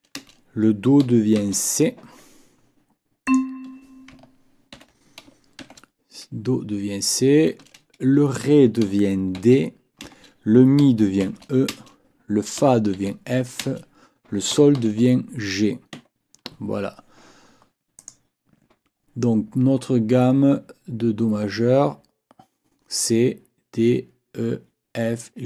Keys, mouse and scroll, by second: 0.2 space, 1.4 shift+c, 2.1 Escape, 4.7 ctrl+l, 5.6 shift+c, 7.5 space, 9.4 shift+d, 10.1 space, 11.2 shift+e, 11.7 shift+space, 12.9 shift+f, 14.8 shift+g, 15.9 Escape.